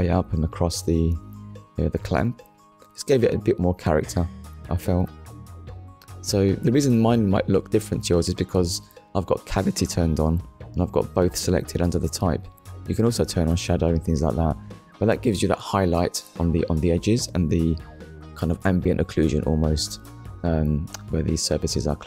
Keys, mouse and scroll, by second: 1.8 click, 11.8 click, 13.0 click, 15.4 middle click, 16.6 ctrl+s, 17.7 middle click, 19.2 KP_1, 20.7 click, 21.8 click.